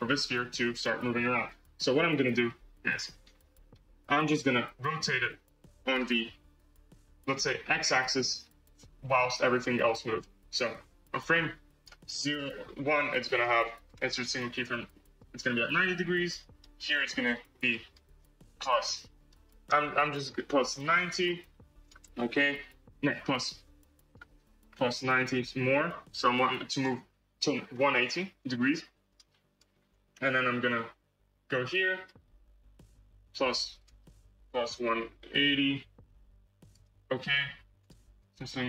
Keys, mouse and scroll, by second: 1.4-3.8 drag, 6.8-8.4 drag, 8.4 ctrl+z, 9.8-12.2 drag, 13.2-15.1 right drag, 15.1-20.0 drag, 23.2-25.7 drag, 29.0-30.6 right drag, 30.6-33.1 drag, 33.3-35.8 drag, 36.6-38.6 right drag.